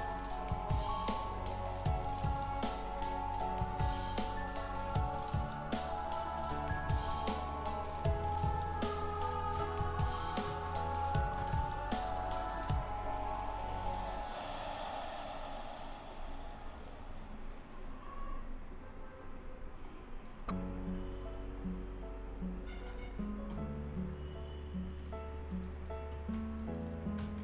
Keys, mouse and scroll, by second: 0.1 alt+click, 3.0 scroll down 1, 3.4 alt+click, 4.1-5.4 scroll down 1, 5.8 click, 8.4-8.9 scroll up 1, 8.9 click, 9.5 click, 10.4 1, 10.7 click, 11.4 1, 12.4 click, 16.9 click, 19.0-19.8 scroll up 1, 20.3 click, 22.9 click, 24.0 scroll down 1, 25.0 click, 26.1 1, 26.6 click, 27.2 1.